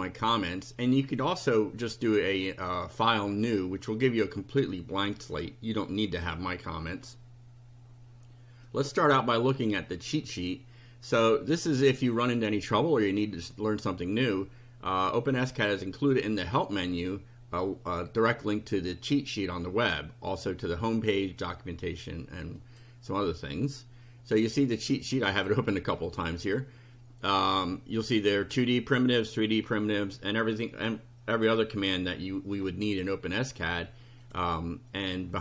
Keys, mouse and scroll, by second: 1.1 click, 5.3 click, 6.2 click, 8.7-9.7 drag, 15.5 click, 22.6 click, 25.4 click, 34.2 click, 35.1 click.